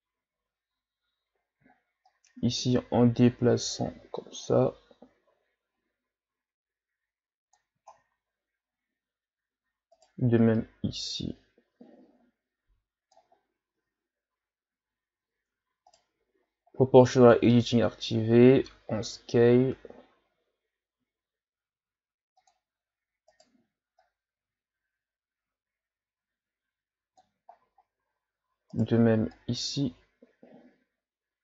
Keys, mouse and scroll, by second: 2.1-5.2 drag, 7.9-8.6 shift+scroll down 3, 9.9 right click, 10.5-13.3 drag, 13.3-13.8 scroll down 3, 13.8 Tab, 14.5-15.2 scroll up 4, 15.2 Tab, 15.9 right click, 17.1 click, 19.0 s, 23.3 right click, 24.0-27.1 drag, 28.7 right click, 29.3-31.4 drag.